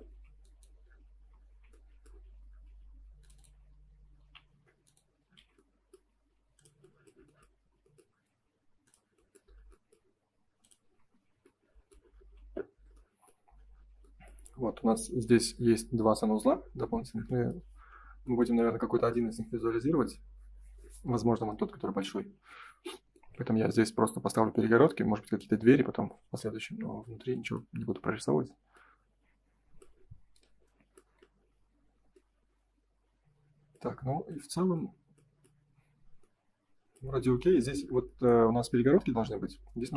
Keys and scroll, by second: 1.4 Escape, 5.3 shift+f, 10.9 space, 11.1 Escape, 12.3 ctrl+s, 15.0 F3, 17.6 F4, 26.3 ctrl+s.